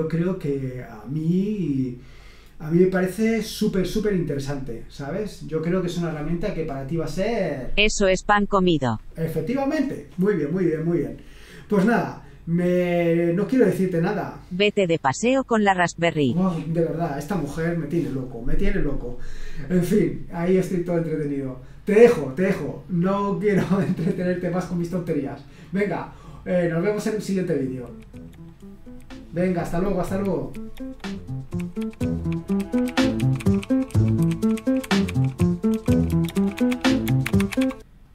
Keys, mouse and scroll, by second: 7.2 click, 14.2 click, 27.3 click, 38.0 click.